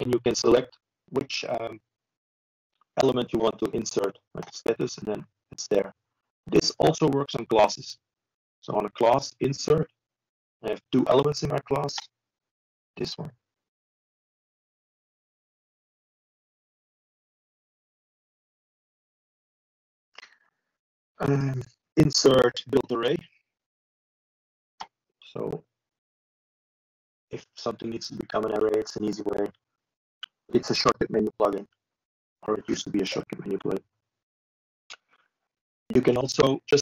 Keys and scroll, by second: 18.0 ctrl+v, 35.3 ctrl+v.